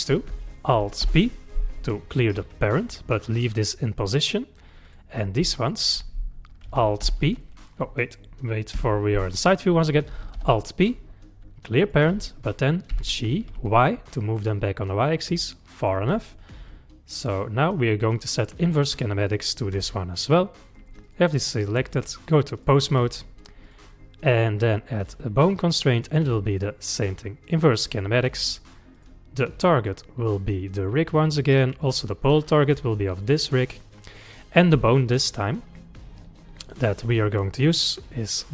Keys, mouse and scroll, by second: 1.0 alt+p, 4.9 click, 5.6 shift+click, 7.0 alt+p, 8.7 KP_3, 10.4 alt+p, 12.9 g, 16.1-16.6 scroll down 6, 16.7-19.8 middle drag, 20.2 middle click, 21.1 click, 21.9-23.1 drag, 23.1 scroll up 2, 23.7 click, 25.0 click, 26.0-29.0 drag, 31.8 click, 33.9-37.0 middle drag, 38.2 click.